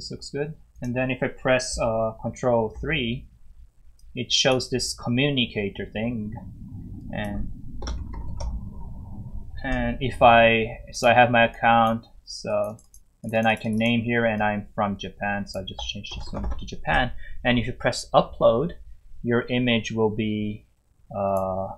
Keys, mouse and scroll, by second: 2.7 ctrl+3, 4.0 click, 7.0 click, 7.6-9.0 typing, 10.9 click, 12.7 double click, 12.8 click, 13.3 click, 13.3 double click, 13.5 click, 13.6 click, 14.4 click, 15.8-17.0 typing, 21.3 click.